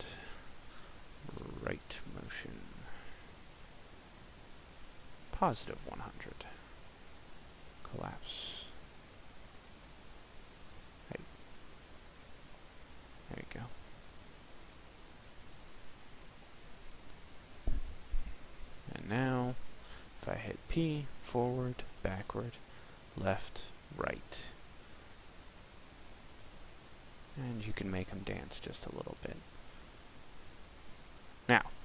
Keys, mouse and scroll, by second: 17.0 click, 17.5 middle click, 19.3 p.